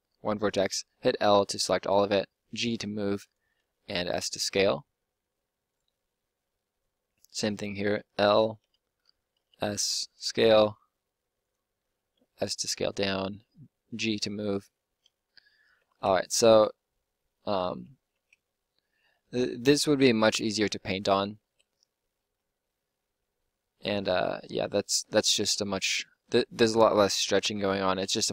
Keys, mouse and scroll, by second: 1.9 g, 3.5 s, 6.7-8.6 drag, 8.6 l, 9.3 s, 10.3 g, 12.8 g, 15.2 click, 15.8 Tab, 17.6 Tab, 21.1 Tab, 21.4 Tab, 22.2 Tab, 23.8 Tab, 27.9 Tab.